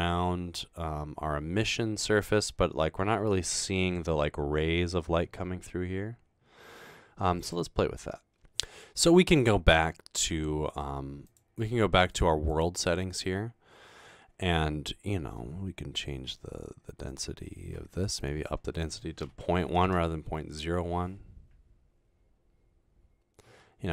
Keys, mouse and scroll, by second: 11.3 click, 12.1 click, 12.5 click, 19.6-20.3 typing.